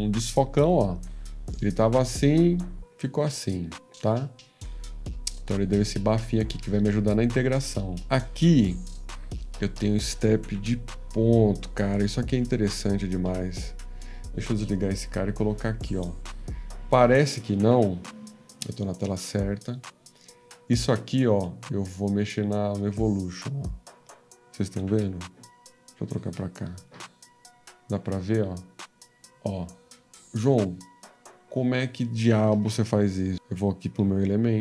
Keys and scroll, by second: 26.3 F13, 32.5 ctrl+z.